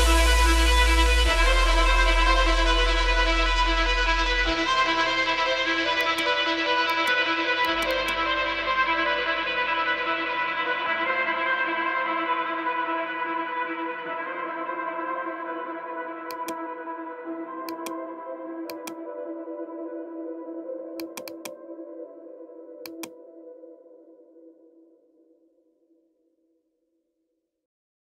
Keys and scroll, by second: 6.3 F3, 6.6 Escape, 7.9-11.0 typing, 10.6 Return, 12.6-13.7 typing, 14.8 space, 22.0 shift+F2, 22.6 Escape.